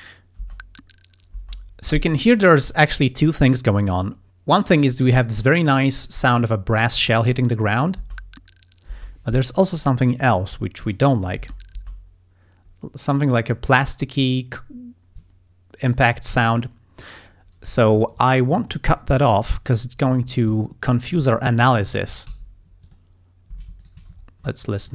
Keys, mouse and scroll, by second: 0.4 space, 1.4 space, 8.0 space, 8.9 space, 10.9 click, 11.4 space, 17.9 ctrl+scroll up 2, 18.6 ctrl+click, 19.7 click, 21.0 ctrl+click, 21.4 ctrl+scroll down 2, 21.4 ctrl+click, 22.0 click, 22.3 s, 22.9 click, 23.5 s, 23.7 s, 23.8 shift+right click, 24.2 ctrl+shift+scroll down 1, 24.8 ctrl+click.